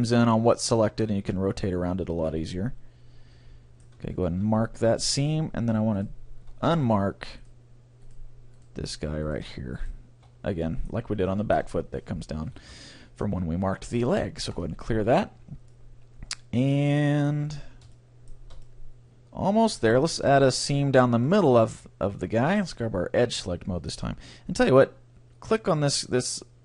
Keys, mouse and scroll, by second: 2.0-3.2 middle drag, 4.4 ctrl+e, 6.0-11.5 right drag, 10.7-11.8 middle drag, 12.6 ctrl+e, 15.0 a, 15.3-16.7 middle drag, 17.7 scroll down 1, 18.9-19.9 middle drag, 21.7 middle click, 22.4-24.1 drag, 22.8 right click, 22.9 middle click, 23.0 right click, 23.2 right click, 23.3-24.6 middle drag, 23.4 right click.